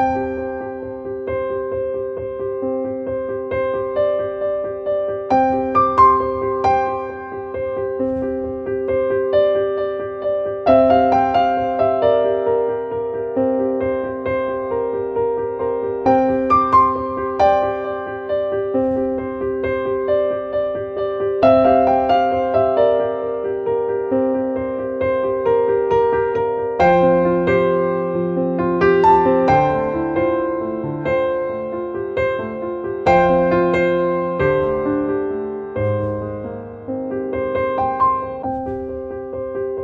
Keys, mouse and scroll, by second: 1.3 click, 2.4 click, 5.3 click, 9.8 click, 16.6 right click, 18.2-21.3 drag, 25.7-31.5 drag, 31.8-33.3 drag, 33.3-35.2 drag.